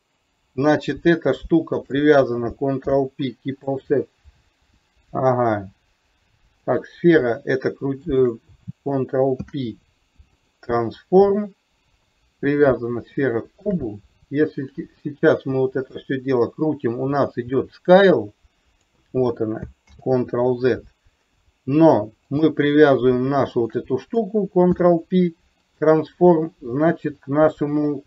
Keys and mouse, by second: 1.8 shift+click, 2.9 ctrl+p, 8.1 shift+click, 9.4 ctrl+p, 13.2-13.8 shift+middle drag, 16.1-18.9 drag, 20.0 ctrl+z, 22.4 click, 23.6 shift+click, 24.8 ctrl+p.